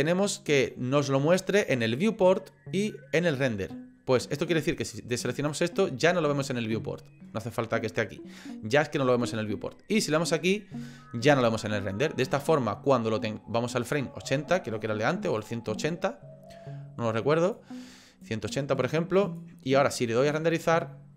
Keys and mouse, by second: 5.4 click, 10.4 click, 12.3-14.0 drag, 15.4-17.5 drag, 18.2-19.4 drag, 20.3 click.